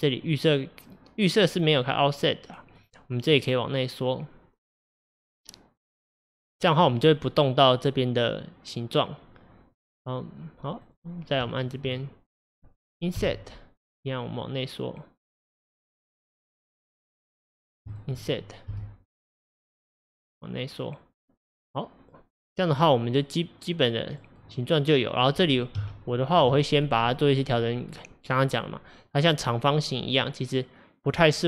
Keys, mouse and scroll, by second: 0.3 click, 1.3 click, 3.4-6.4 drag, 10.9 click, 11.6 shift+click, 17.6 click, 18.0 shift+click, 18.8 l, 22.8-24.8 middle drag, 24.8-25.3 scroll up 2, 25.8 KP_7, 26.8-27.2 scroll up 2, 27.2-30.2 shift+middle drag, 31.2 click.